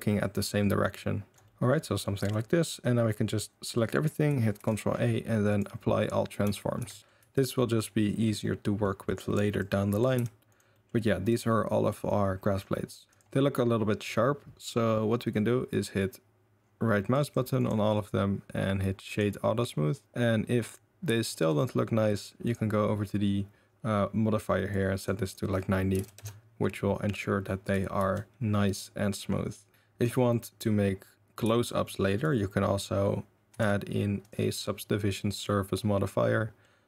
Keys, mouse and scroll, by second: 1.1 click, 1.3 middle click, 1.3 r, 1.7 middle drag, 2.2 a, 3.7 middle drag, 4.5 ctrl+a, 6.8 shift+s, 7.0 click, 7.0 middle click, 7.2 z, 7.8 middle click, 8.4-8.8 middle drag, 8.8 drag, 9.2-9.5 middle drag, 9.5-9.9 drag, 10.0-10.7 middle drag, 10.1 g, 10.8-11.2 middle drag, 11.2 drag, 11.7 click, 12.6-13.0 drag, 13.1 click, 17.2 middle click, 17.5-19.1 drag, 19.1-20.6 middle drag, 21.2 middle click, 21.5 click, 21.5 middle click, 22.4 click, 24.7 right click, 25.2 right click, 28.0 ctrl+z, 28.3 ctrl+z, 28.8-29.1 middle drag, 29.5 middle drag, 29.7 a, 30.4 middle drag, 31.4 a, 31.7 middle click, 33.5 ctrl+1, 34.2 click, 35.2-35.5 middle drag, 36.6-36.8 middle drag.